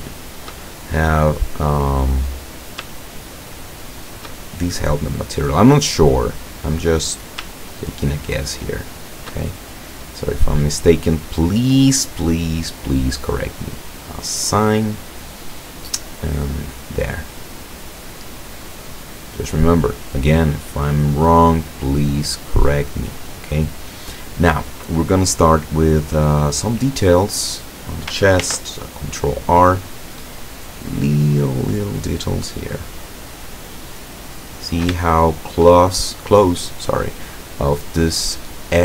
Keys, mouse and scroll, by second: 0.3 shift+right click, 0.7-2.3 shift+middle drag, 2.3-2.8 scroll up 1, 3.4 shift+right click, 4.0 shift+right click, 4.8-5.8 middle drag, 6.4 scroll up 1, 6.6 middle click, 8.1 shift+right click, 8.6 shift+right click, 9.2 shift+right click, 9.6 shift+middle click, 9.8 shift+scroll up 1, 12.6 middle click, 13.6 click, 14.6-15.0 scroll down 1, 15.3-15.6 scroll up 2, 17.4 scroll down 2, 17.9-18.4 scroll up 4, 18.4 middle click, 19.1 scroll down 2, 19.6 middle click, 20.6 scroll down 2, 21.1-22.2 middle drag, 22.2-22.8 scroll up 1, 23.1 scroll down 1, 27.1 middle click, 28.5 ctrl+r, 29.8 click, 33.8 click, 34.5-35.0 scroll up 1, 35.2 shift+middle click, 35.7-36.5 shift+scroll up 2, 36.9 middle click, 37.4 middle click, 37.8 middle click.